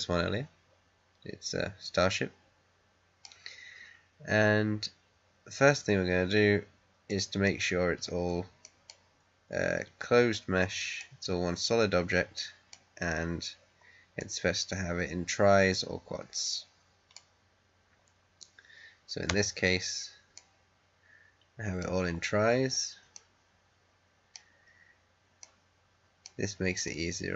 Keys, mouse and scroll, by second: 7.0 middle click, 8.0-8.5 scroll down 1, 8.5 middle click, 9.0-10.9 scroll up 1, 10.9-13.0 middle drag, 13.0-13.8 scroll up 1, 14.1-19.2 middle drag, 19.2 Tab, 20.3-21.6 middle drag, 21.7 scroll up 1, 23.0-24.6 middle drag, 24.6-25.3 scroll down 1, 25.6 middle click, 26.1 scroll up 2, 26.8-27.3 middle drag.